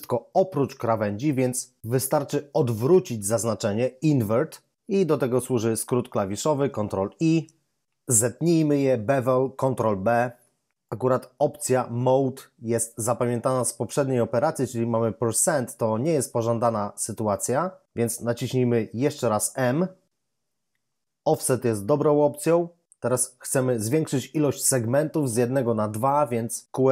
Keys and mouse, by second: 7.1 ctrl+i, 10.1 ctrl+b, 18.9 m.